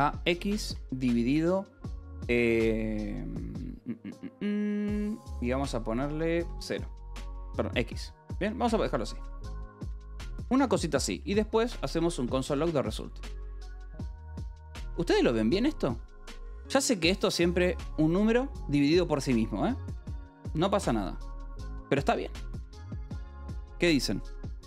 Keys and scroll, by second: 0.0 space, 0.6 /, 1.2 space, 6.9 x, 9.4 ctrl+g, 9.4-12.1 typing, 12.8 ctrl+g, 13.1 j, 13.9 a, 14.0 Return, 14.8 Escape, 16.1 k.